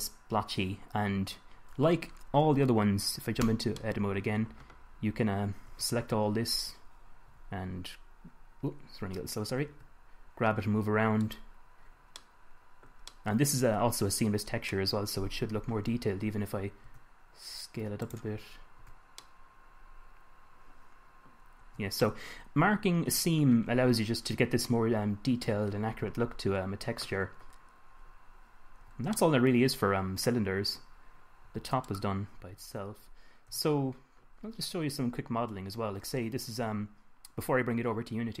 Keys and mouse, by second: 1.1-3.8 middle drag, 3.8 Tab, 6.0 a, 6.4 a, 7.6 g, 10.1 g, 17.3 s, 18.6 click, 19.3 Tab, 22.0 Tab, 24.4-28.9 middle drag, 29.3 Tab, 29.8 middle drag, 30.5-31.0 middle drag, 31.8 Tab, 32.9 Tab, 33.9 KP_1.